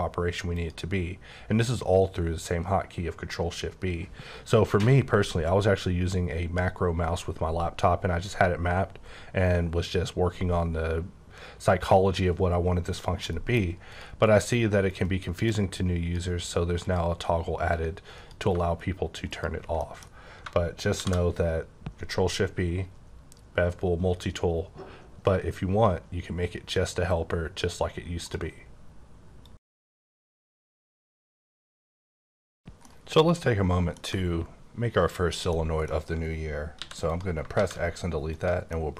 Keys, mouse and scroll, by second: 0.5 click, 12.9 h, 13.3 middle click, 13.9 click, 14.9 click, 16.8 click, 18.0 click, 19.8 middle click, 21.0 shift+b, 21.5-24.4 scroll down 8, 24.4-26.2 scroll up 8, 26.2-26.6 scroll up 1, 26.9-27.5 scroll up 1, 27.5-28.2 scroll up 2, 28.2 click, 35.5 middle click, 35.6 scroll down 1, 36.7 x, 37.0 click, 37.6 shift+a, 38.3 click, 38.6 middle click.